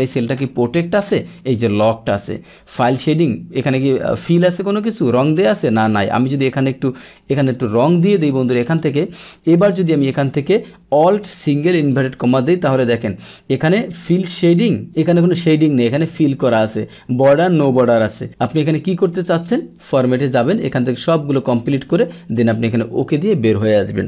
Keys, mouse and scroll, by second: 5.5 click, 7.5 click, 8.6 click, 9.2 click, 14.8 click, 19.4 click, 20.6 click, 21.0 click, 21.8 click, 23.2 click.